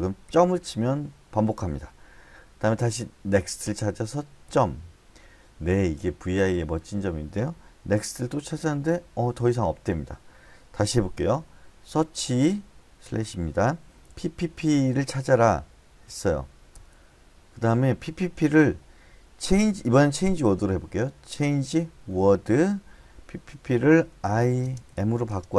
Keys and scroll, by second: 0.2 ., 3.3 n, 4.5 ., 8.3 n, 12.0 /, 14.1 p, 14.4 p, 14.6 p, 16.7 Return, 19.5 c, 22.1 w, 24.2-25.5 typing.